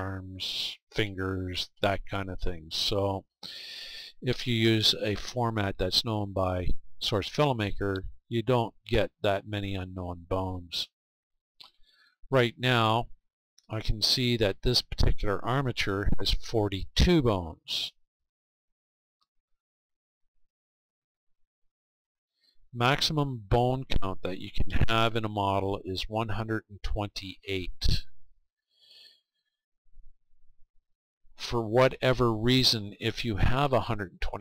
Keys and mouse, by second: 19.4-34.4 middle drag.